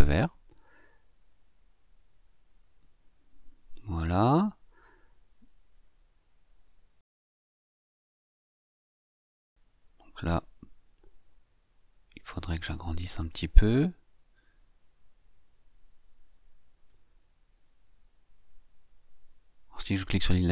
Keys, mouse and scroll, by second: 3.4-6.0 scroll up 2, 6.0-7.6 scroll up 1, 7.6-12.5 scroll up 1, 12.5-20.5 drag.